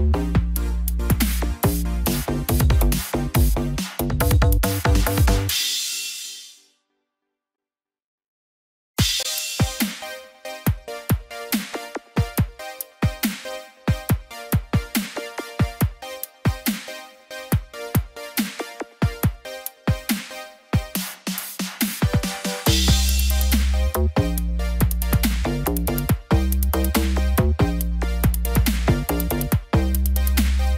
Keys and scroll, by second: 1.2 ctrl+j, 12.9 ctrl+i.